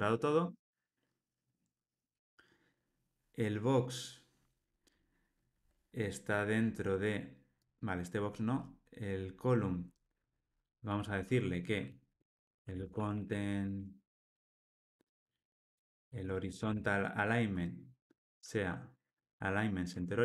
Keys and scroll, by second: 18.2 Return, 19.8 Return.